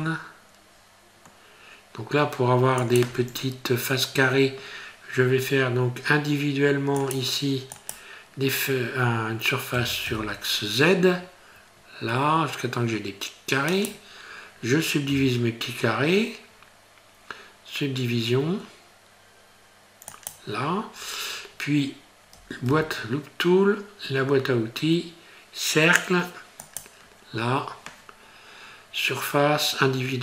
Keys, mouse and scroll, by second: 3.3-4.7 scroll up 3, 4.7-5.6 scroll down 2, 7.0 click, 9.8 s, 15.1 q, 21.5 scroll up 1, 22.7 q.